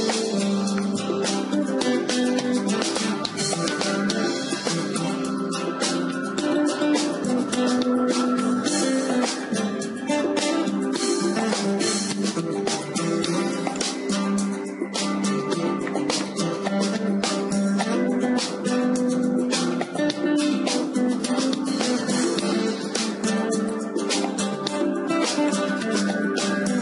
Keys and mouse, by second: 1.9-3.9 right drag, 4.3 ctrl+e, 7.9-12.9 right drag, 12.9 ctrl+e, 14.9-16.7 middle drag, 16.7 KP_0, 16.9 middle click, 17.2-18.3 drag, 18.3 Tab, 21.0 KP_7, 21.7 middle click, 24.3-26.8 drag.